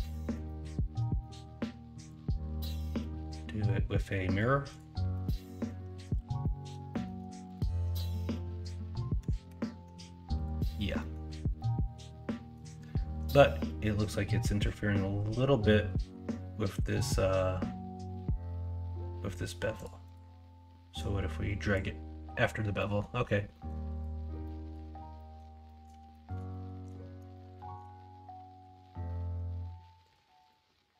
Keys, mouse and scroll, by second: 0.1 alt+z, 0.4-1.0 middle drag, 1.2 middle click, 3.1-5.1 drag, 5.1-6.0 middle drag, 6.1 alt+z, 6.4-6.7 middle drag, 6.9 middle click, 9.5 ctrl+KP_Subtract, 10.9 middle drag, 11.5-12.5 middle drag, 22.7 middle drag, 23.5 middle drag, 24.6 middle drag, 25.1 middle drag, 25.6 middle drag, 26.1 middle drag, 26.5 shift+middle drag, 27.3 shift+middle drag.